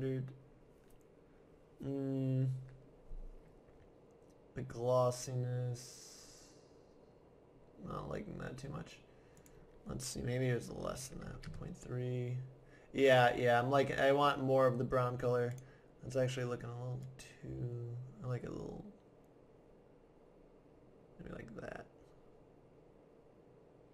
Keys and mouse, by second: 9.4-11.0 drag, 15.5-17.1 drag.